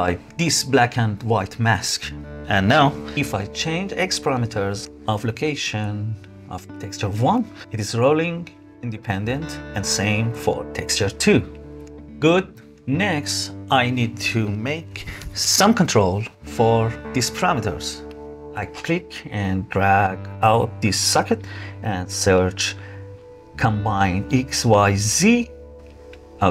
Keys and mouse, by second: 0.5-1.8 middle drag, 3.0-7.6 shift+drag, 8.5-11.6 shift+drag, 14.0 middle click, 15.2 click, 17.8 click, 19.5 click, 19.8-25.5 drag, 23.1 BackSpace.